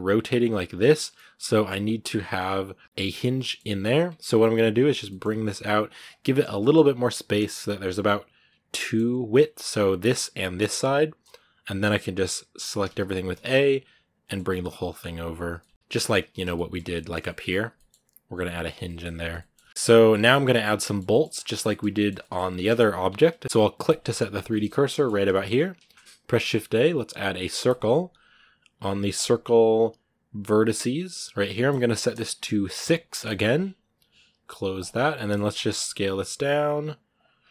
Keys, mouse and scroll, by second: 0.9 middle click, 1.3 scroll up 2, 3.1 scroll down 1, 3.2 middle click, 3.6 scroll up 2, 3.9 Tab, 6.0 shift+middle click, 6.3 g, 8.6-12.7 middle drag, 12.7 a, 15.4 shift+middle click, 15.7-16.3 scroll down 6, 15.7 shift+middle click, 16.3 shift+middle click, 16.6 scroll up 1, 16.7 middle click, 17.3 scroll up 1, 17.5 middle click, 18.4 scroll down 2, 18.6 shift+middle click, 18.9 scroll up 1, 19.2 middle click, 19.8 scroll up 1, 19.9 middle click, 20.5 scroll down 4, 20.6 shift+middle click, 21.1-21.5 scroll up 1, 21.5-22.9 shift+middle drag, 22.9 Tab, 23.2 scroll up 2, 23.4 a, 23.7 click, 24.2 click, 24.6 scroll down 1, 24.7 middle click, 25.2-27.5 scroll up 2, 27.5 shift+a, 33.1-34.8 drag, 34.8 scroll down 1, 34.9 middle click, 35.1 scroll up 1, 35.3 scroll down 3, 35.6 s, 37.2 scroll up 2.